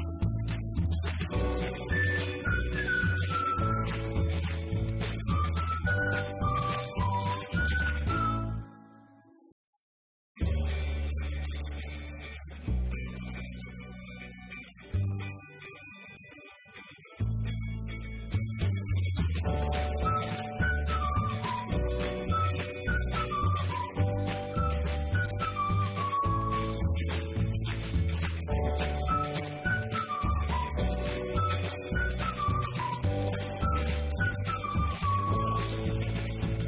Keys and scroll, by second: 22.5-24.0 typing.